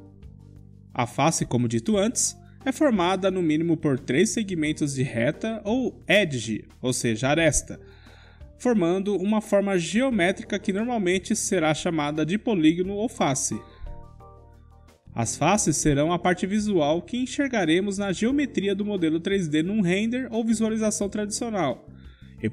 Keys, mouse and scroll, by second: 1.2 click, 1.9-6.7 middle drag, 8.0 3, 10.6-12.8 middle drag, 13.4-15.4 drag, 16.0 middle click, 18.4-20.4 drag, 20.4-22.5 middle drag.